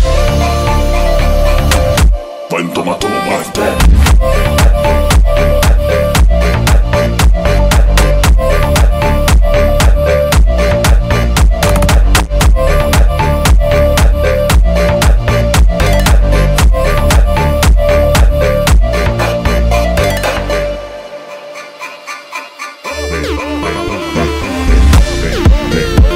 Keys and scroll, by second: 9.6 space, 23.3 Delete.